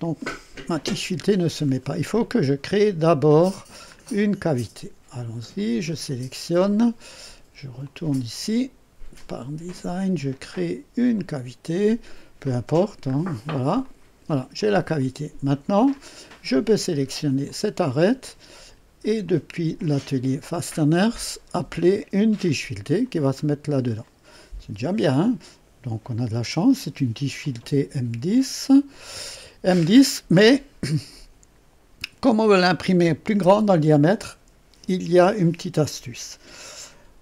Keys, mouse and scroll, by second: 0.1 click, 1.0 Delete, 1.5 scroll down 1, 2.1-3.2 drag, 3.3 click, 3.8 scroll up 1, 4.4 right click, 5.5 click, 7.8 click, 9.2 click, 11.1 click, 13.0 scroll up 1, 13.8 click, 14.6 click, 15.9 click, 17.4 click, 19.2 click, 20.4 click, 22.4 click, 23.3-23.7 scroll up 1, 24.0 right click, 28.3 click, 30.0 scroll up 1, 30.5 right click.